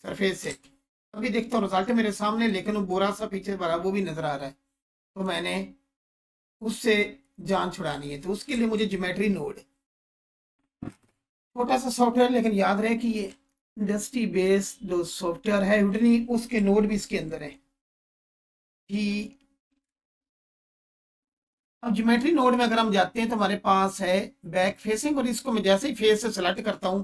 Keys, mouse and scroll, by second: 0.4 ctrl+space, 2.0-2.3 scroll up 1, 2.4-3.1 alt+shift+click, 3.4-4.1 scroll up 1, 5.1 click, 8.5 ctrl+space, 13.2-13.9 alt+shift+drag, 16.9 shift+a, 17.3 click, 18.7 g, 19.7 Return, 20.9 click, 21.8 scroll up 1, 24.9-26.5 drag.